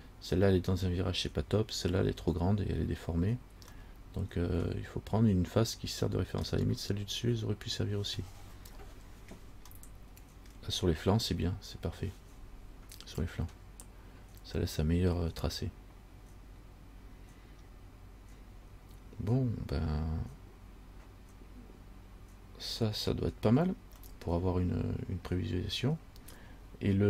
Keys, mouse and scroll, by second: 4.0 middle click, 6.6 scroll down 1, 9.9 middle click, 24.3 middle click.